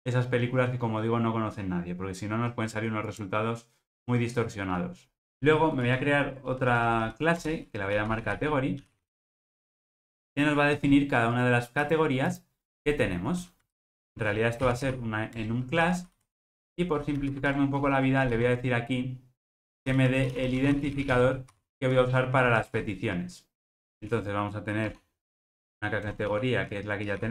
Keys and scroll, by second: 5.9 super+n, 15.4 Return.